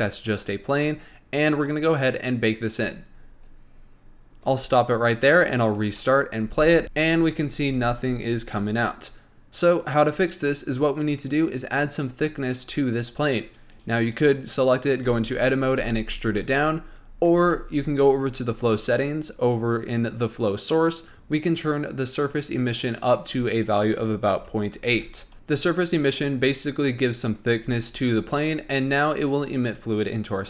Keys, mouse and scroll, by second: 2.0 click, 3.0-6.0 drag, 6.2 click, 6.8 space, 7.9 space, 10.6 click, 14.4 click, 15.4 Tab, 16.2 e, 17.8 Tab, 21.0 click, 23.4-25.3 drag, 29.1-30.2 scroll up 2, 30.2-30.4 scroll down 1.